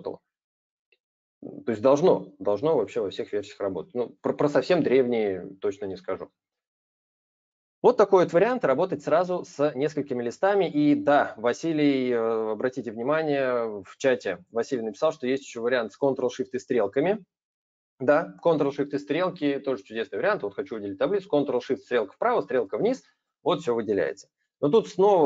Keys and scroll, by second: 21.7 ctrl+shift+Right, 22.3 ctrl+shift+Down.